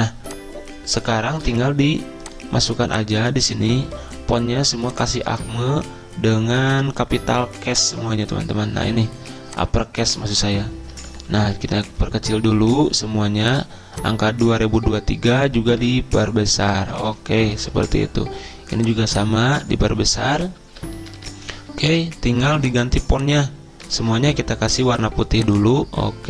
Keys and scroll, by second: 1.5 ctrl+v, 5.4 Return, 11.7 ctrl+[, 11.8 ctrl+[, 16.0 ctrl+], 16.4 ctrl+], 24.1 ctrl+a.